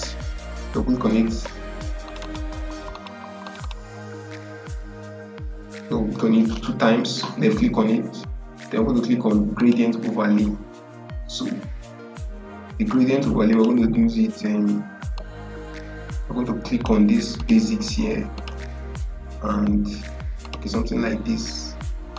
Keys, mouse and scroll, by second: 1.9 click, 9.5 click, 13.4-17.3 drag.